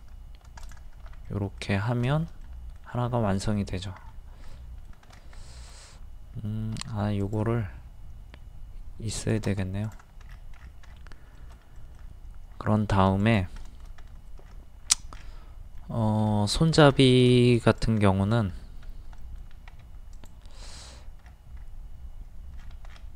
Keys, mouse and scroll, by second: 0.6 shift+click, 1.3 middle click, 2.4 middle click, 3.1-3.4 scroll up 1, 3.5 middle click, 4.1-4.4 scroll up 1, 4.6 middle click, 5.1 scroll down 1, 5.4 middle click, 5.9-6.3 scroll up 1, 6.8 t, 7.2 click, 10.3-10.6 scroll down 1, 11.4 shift+middle click, 12.5-12.8 scroll up 1, 12.9 click, 13.6 middle click, 14.1-14.4 scroll up 1, 14.4 middle click, 14.4-14.9 scroll down 1, 15.1-15.5 scroll up 1, 15.7 middle click, 16.3-16.6 scroll down 1, 17.3 shift+middle click, 17.7 click, 18.0 middle click, 18.5 scroll up 1, 19.2 middle click, 20.1 click, 21.3 scroll up 1, 22.6 scroll down 1.